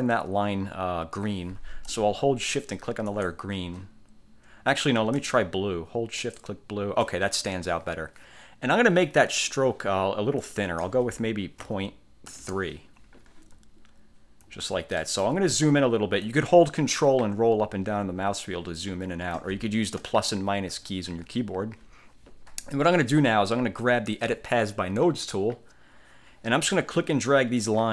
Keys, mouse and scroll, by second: 3.2 shift+click, 6.3 shift+click, 10.5 click, 11.7 ., 12.5 Return, 14.0-14.5 ctrl+scroll up 4, 15.1 ctrl+click, 15.5-15.9 ctrl+scroll down 2, 16.1 ctrl+scroll up 2, 17.0-17.5 ctrl+scroll up 2, 17.6-18.1 ctrl+scroll down 2, 18.3-18.9 ctrl+scroll up 4, 18.9-19.3 ctrl+scroll down 2, 20.2 -, 20.6 =, 20.9 -, 21.3 =, 25.1 click, 27.7-27.9 drag.